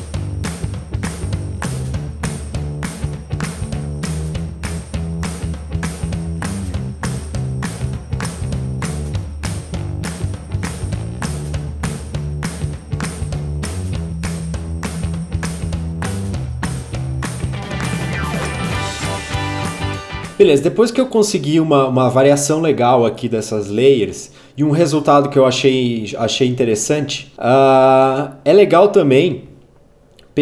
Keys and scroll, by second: 0.1 ctrl+d, 0.2 alt+Page_Down, 1.2 ctrl+d, 1.3 alt+Page_Down, 3.0 ctrl+d, 3.1 alt+Page_Down, 4.2 ctrl+d, 4.3 alt+Page_Down, 5.0-7.6 typing, 7.6 Return, 8.5 ctrl+a, 8.8 alt+Page_Down, 8.9 ctrl+Up, 9.0 alt+Page_Down, 9.2 alt+Page_Down, 9.3 alt+Page_Down, 9.5 ctrl+Up, 10.1 Page_Down, 14.0 ctrl+Down, 14.7 ctrl+Down, 16.8 u, 17.3 0, 17.5 Return.